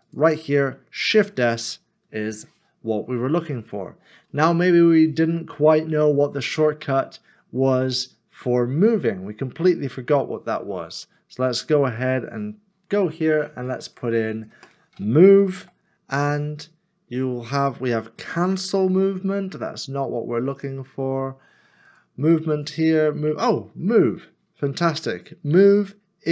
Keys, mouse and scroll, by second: 1.3 shift+s, 15.3 m, 15.8 e.